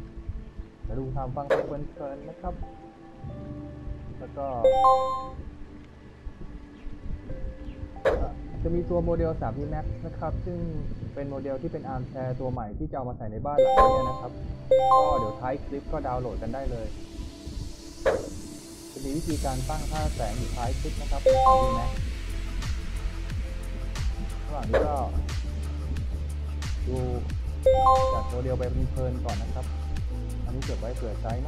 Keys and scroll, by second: 2.0-3.8 typing, 5.6 w, 8.9 d, 9.6 w, 11.4 w, 15.9 w, 18.6 w, 20.1-21.1 typing, 22.3 w, 23.5 w, 25.7-27.0 typing, 28.7 w, 30.8 d.